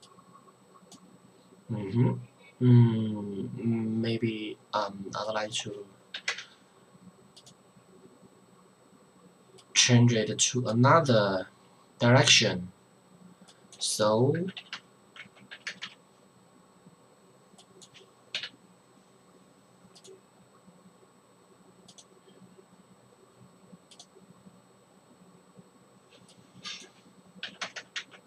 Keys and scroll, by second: 6.2 KP_9, 6.3 KP_0, 14.4 KP_3, 14.6 KP_6, 14.7 KP_0, 15.1 Tab, 15.5 KP_3, 18.4 KP_3, 27.5 KP_3, 27.6 KP_0, 27.7 KP_0, 27.9 Tab.